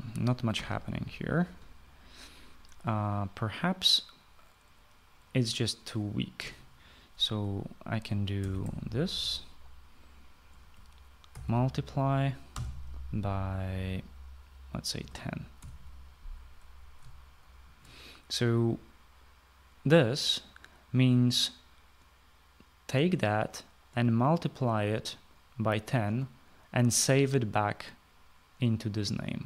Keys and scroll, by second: 1.2 Escape, 7.0 Return, 8.8-10.4 typing, 11.7-13.1 typing, 15.4-16.2 typing.